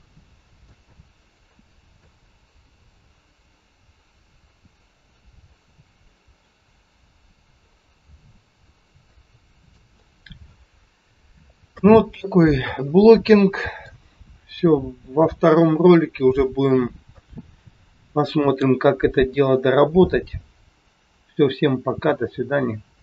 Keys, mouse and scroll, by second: 0.8 scroll up 2, 1.3 scroll down 1, 1.9 middle click, 7.7 scroll down 8, 9.1 shift+middle click, 9.1 scroll down 3, 9.9 middle click.